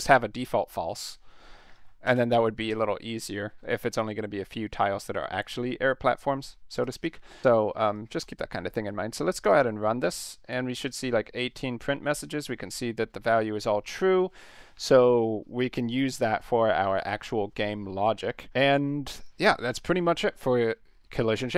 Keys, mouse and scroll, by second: 0.0-0.5 typing, 1.7 ctrl+z, 2.0 BackSpace, 2.7 ctrl+s, 6.8 click, 7.0 ctrl+s, 7.9 click, 8.2 click, 9.4 click, 19.4 click.